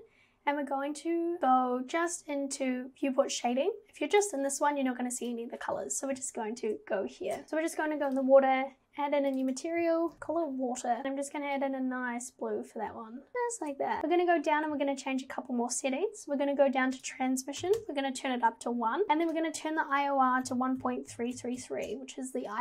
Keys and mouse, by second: 4.2 click, 5.3 click, 9.5-11.0 drag, 17.2 click, 19.4-21.9 drag, 21.3 KP_3.